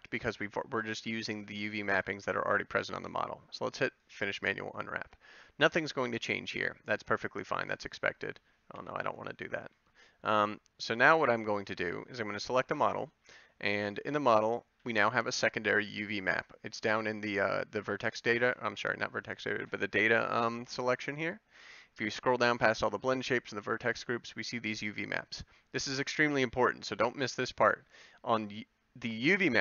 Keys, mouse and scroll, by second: 14.2-19.6 drag.